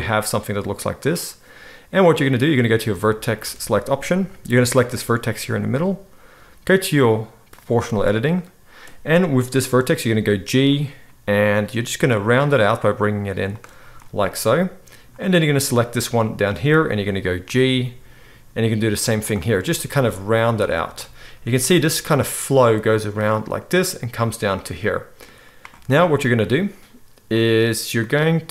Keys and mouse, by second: 2.7-4.9 middle drag, 4.9-7.5 right drag, 7.5 middle click, 7.6-27.4 right drag, 10.1 g, 17.4 g, 20.0 g, 27.4-28.5 middle drag.